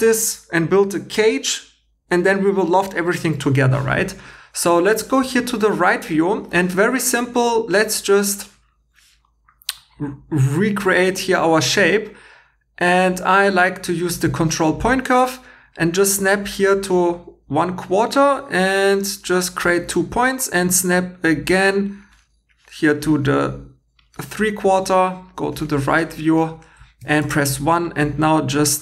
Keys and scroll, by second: 27.0 1.